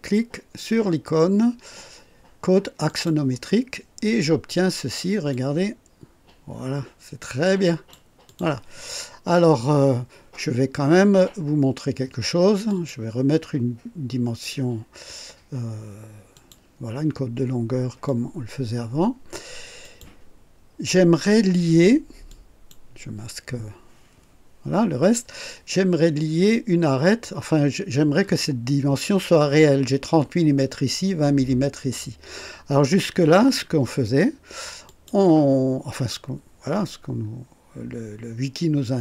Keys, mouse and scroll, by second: 2.8 click, 5.3-8.1 drag, 8.2 click, 12.6 click, 16.3 click, 18.0-19.5 drag, 19.8 click, 22.2 click, 34.8 click.